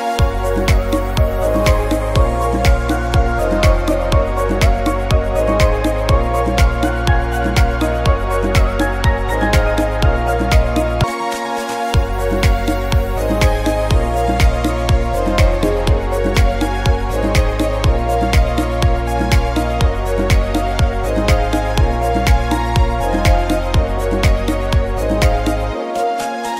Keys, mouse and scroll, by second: 0.4 click, 0.8 click, 1.1 click, 2.2 click, 2.7 click, 3.1 click, 3.6 click, 9.6 click, 17.4 middle click, 20.3 shift+middle click, 20.3 scroll up 1, 21.3 middle click, 21.3 scroll down 1, 25.2 click.